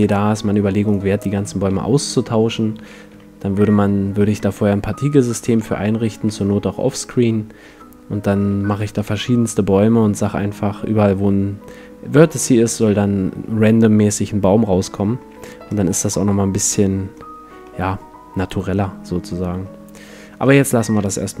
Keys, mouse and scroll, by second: 0.0 F11, 0.0-1.7 drag, 0.9-2.6 right drag, 1.7 a, 3.1 t, 4.4-5.8 middle drag, 5.5 a, 6.2 a, 6.7 middle click, 9.6-12.3 middle drag, 12.5-21.4 middle drag.